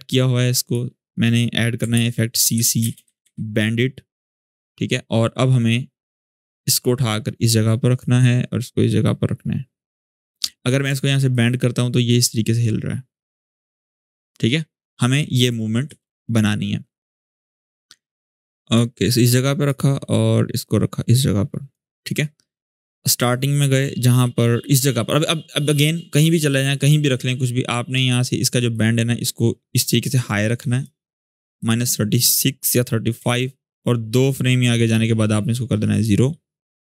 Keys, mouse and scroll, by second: 1.7 ctrl+space, 1.9-3.5 typing, 3.9 click, 4.8-6.5 scroll down 1, 6.5-7.7 drag, 8.8-9.7 drag, 11.1-15.4 ctrl+drag, 15.6 ctrl+z, 16.2-18.3 scroll up 1, 18.5-19.4 drag, 20.4-21.6 drag, 22.6-24.8 drag, 28.5-29.7 drag, 32.9 u, 34.0-34.7 drag, 36.7 0, 36.7 Return.